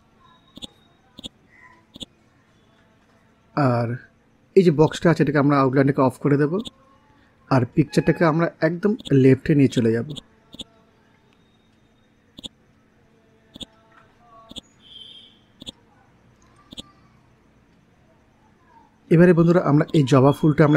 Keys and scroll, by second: 5.4 ctrl+z, 11.0 ctrl+z, 14.9 ctrl+z, 16.2 l.